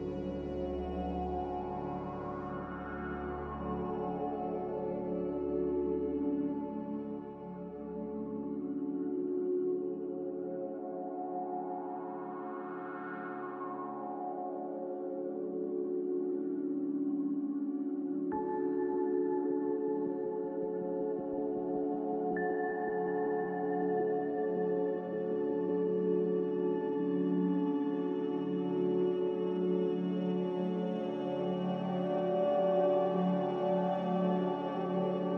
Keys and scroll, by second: 5.0-6.7 typing, 10.9 x, 22.2 ctrl+z.